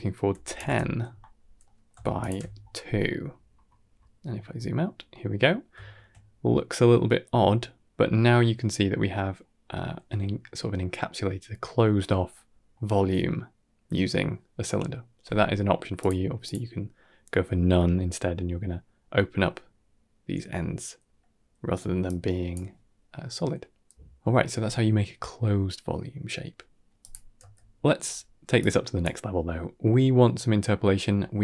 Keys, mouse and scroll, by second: 1.5 middle click, 2.1 alt+shift+click, 2.6-5.0 scroll down 16, 5.0-5.5 middle drag, 5.7 shift+middle click, 6.0-7.8 middle drag, 9.3 middle drag, 12.2-12.6 middle drag, 15.8-16.4 drag, 17.6-17.9 middle drag, 19.0-19.3 middle drag, 20.5-20.9 middle drag, 21.9-22.4 drag, 22.9-23.8 middle drag, 26.9 drag, 27.3 x, 28.5-28.9 drag, 29.4 middle drag.